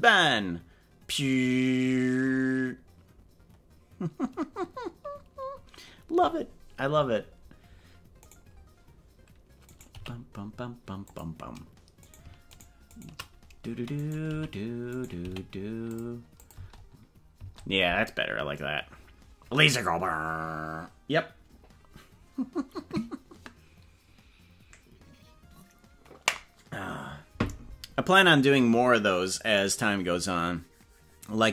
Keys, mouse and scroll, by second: 8.3 right click, 9.8 right click, 9.9 g, 12.6 shift+right click, 14.0 right click, 14.3 g, 14.9 right click, 15.3 g, 16.4 click, 16.5 space, 17.5 space.